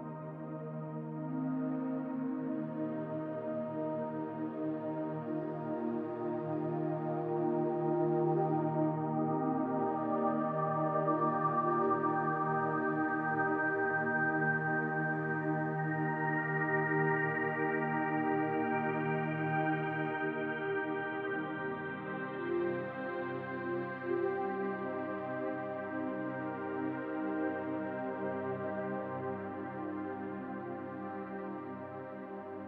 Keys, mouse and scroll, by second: 1.5-2.3 scroll down 3, 2.3-2.7 scroll down 7, 6.0 click, 6.0-6.4 scroll down 6, 12.3 click, 16.9 shift+click, 25.5 click, 27.9 click.